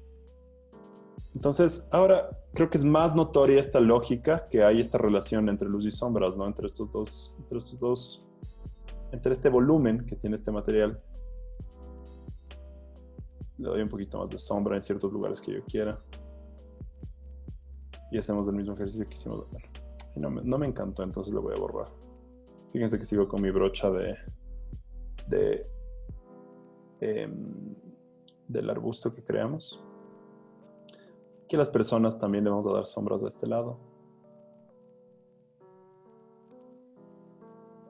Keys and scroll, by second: 0.9 super+d, 1.2 z, 3.9 z, 5.2 b, 9.8 super+z, 14.7 super+z, 17.5 z, 20.8 e, 24.0 b, 29.2 z, 30.7 b, 35.6 super+z.